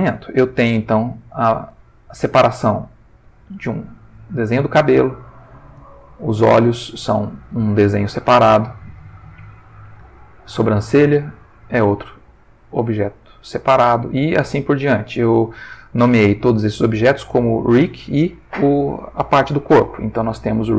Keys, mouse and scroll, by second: 0.1 ctrl+middle click, 0.9 click, 1.7 g, 4.0 Escape, 5.7 click, 6.4 g, 8.4 Escape, 10.3 click, 12.1 g, 13.1 Escape, 13.6 ctrl+middle click, 14.7 middle click.